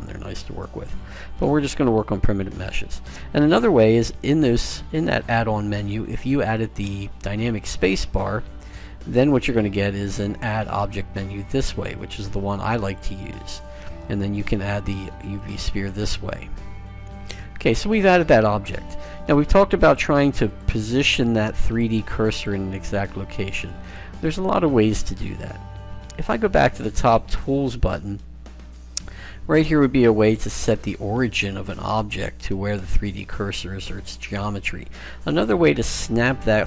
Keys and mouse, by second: 7.7 space, 17.4-19.2 middle drag, 20.0-25.7 drag, 27.5 click, 30.3 click.